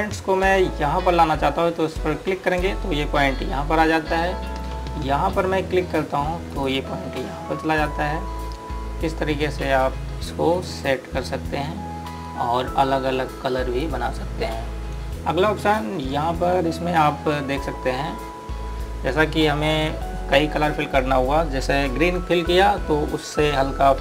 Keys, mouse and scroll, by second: 3.3 click.